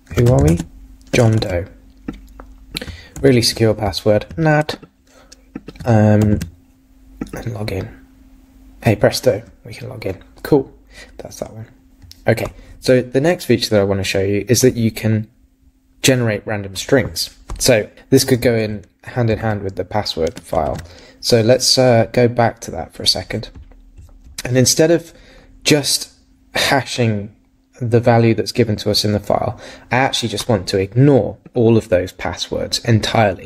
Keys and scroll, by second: 0.5 super+`, 1.2 shift+super+~, 3.2 super+c, 19.4 super+Tab.